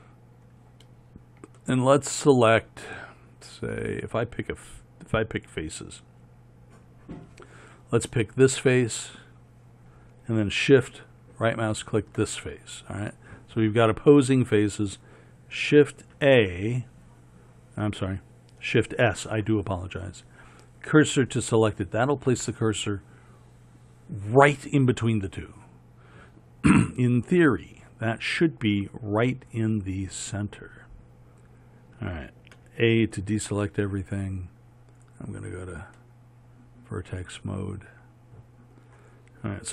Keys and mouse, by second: 16.2 shift+a, 32.7 a.